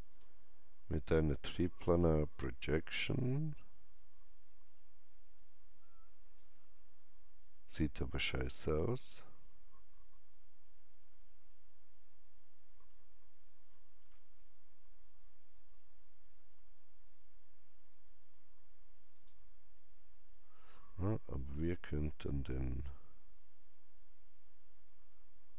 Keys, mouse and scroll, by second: 0.0 click, 2.8-9.0 alt+drag, 9.3-11.0 alt+drag, 9.3-10.9 scroll up 1, 10.9 scroll up 1, 12.8-13.5 scroll down 1, 13.5 scroll up 1, 19.1 click, 19.1 scroll up 1.